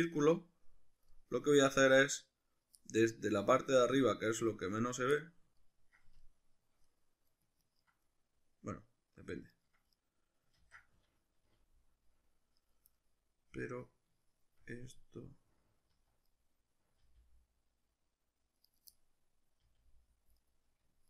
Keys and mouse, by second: 4.8 right click, 5.2-7.6 middle drag, 7.6 ctrl+right click, 8.2-9.6 middle drag, 9.6 ctrl+right click, 9.7-12.7 middle drag, 10.6 ctrl+z, 11.5 g, 12.7 right click, 13.0-14.1 middle drag, 14.2-18.7 shift+middle drag, 15.9 z, 17.0 g, 18.7 right click, 18.9-20.5 middle drag, 19.6 g, 20.5 right click.